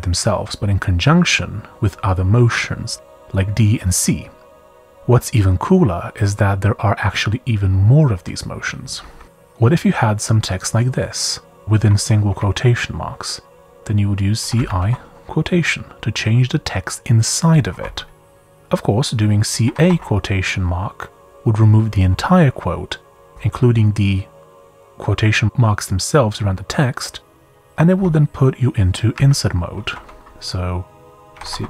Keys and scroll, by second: 8.8-9.1 typing, 9.5 Page_Up, 10.2 j, 11.5 w, 12.0 w, 13.8-15.2 typing, 17.7 typing, 19.2-20.3 typing, 27.9 typing, 29.1-29.9 typing, 31.1-31.6 typing.